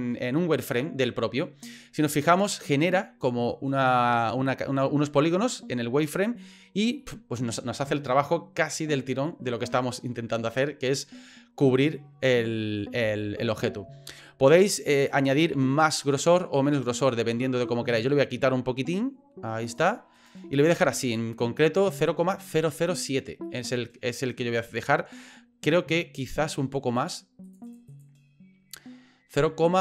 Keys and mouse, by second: 3.5-6.4 middle drag, 7.0 middle click, 9.2 middle click, 10.3-11.9 middle drag, 13.2 shift+middle click, 15.1-19.8 drag, 20.2 right click, 20.7 middle click, 23.4 middle click, 26.9 click, 27.5 click, 27.9 click.